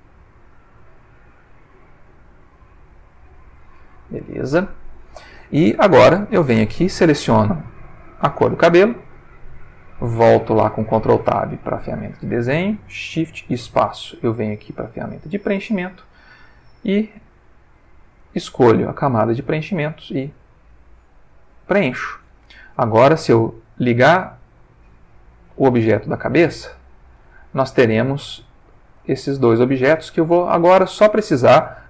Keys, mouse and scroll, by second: 1.0-1.7 drag, 1.8 click, 2.5-3.8 drag, 4.0-4.4 ctrl+middle drag, 7.1 click, 10.2 ctrl+Tab, 11.7 click, 13.5 shift+space, 15.3 click, 17.3 click, 18.2 click, 20.1 click, 23.5-24.1 drag, 26.6 Tab, 27.5-28.5 middle drag, 28.9-30.6 ctrl+shift+middle drag.